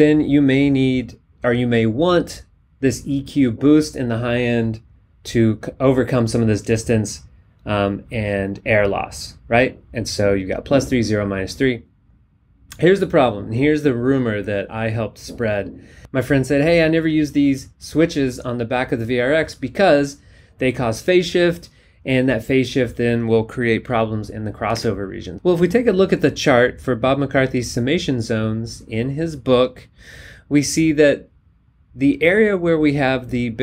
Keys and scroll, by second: 24.9 alt+Tab.